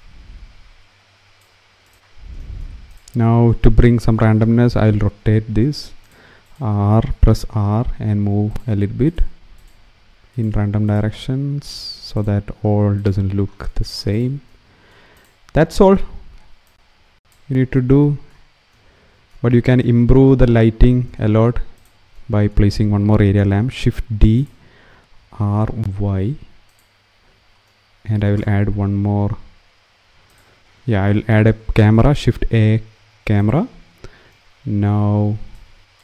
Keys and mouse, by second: 1.6 click, 2.6 click, 4.4 r, 5.0 z, 5.8-7.1 drag, 7.1 r, 8.2 click, 9.4 click, 9.5 r, 10.1 click, 10.8 r, 11.5 click, 12.1 r, 12.7 click, 14.9 click, 16.4 click, 21.4 click, 23.4 shift+d, 25.0 r, 25.3 y, 26.3 click, 30.0 click, 31.8 shift+a, 34.0 middle click.